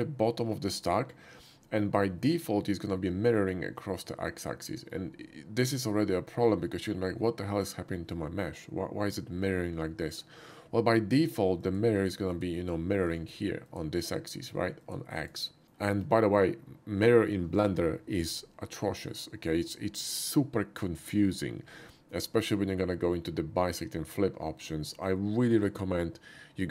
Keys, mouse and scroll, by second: 0.9-1.4 middle drag, 2.2-4.9 middle drag, 6.4-10.1 middle drag, 11.6 click, 12.3 click, 13.1 click, 13.6 click, 14.3 click, 14.8 click, 15.2 click, 15.6 middle click.